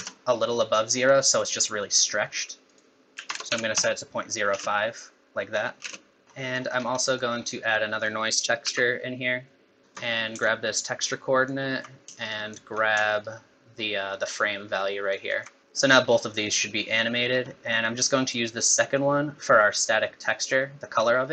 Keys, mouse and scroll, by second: 2.7 click, 4.5 space, 5.9 space, 6.2 shift+click, 6.2-8.0 scroll down 7, 6.3 middle click, 7.0 middle click, 8.0 click, 8.6 shift+d, 9.8 shift+right click, 10.8 alt+right click, 12.3 shift+right click, 13.2 alt+right click, 15.6 middle click, 15.6-16.1 scroll up 3, 16.5 middle click, 17.3-17.7 scroll down 2, 17.5 middle click, 18.9 click.